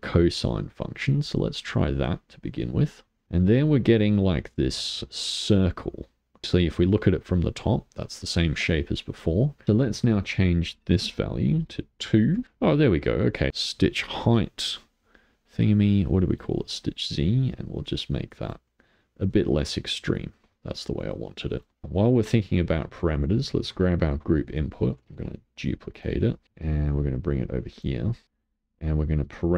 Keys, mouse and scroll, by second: 3.0-6.4 middle drag, 6.4-6.8 scroll down 4, 6.8-10.2 middle drag, 10.2-12.4 drag, 13.3-16.4 shift+middle drag, 16.4-18.9 drag, 18.9-20.4 middle drag, 21.8-23.1 middle drag, 23.1 click, 24.5 middle click, 25.1 shift+d, 26.4 middle click, 27.1-28.2 drag, 29.1 click.